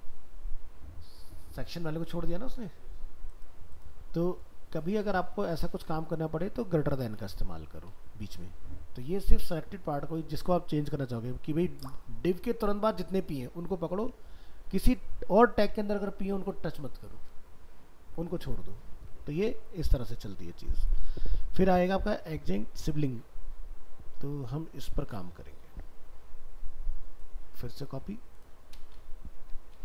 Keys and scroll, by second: 20.4 ctrl+w.